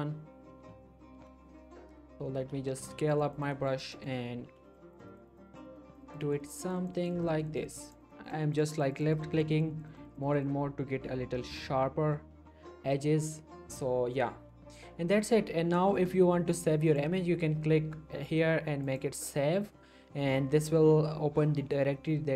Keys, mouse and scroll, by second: 0.8-2.8 typing, 3.1 click, 4.4 ], 4.7 click, 10.9-11.7 scroll down 1, 16.9 click.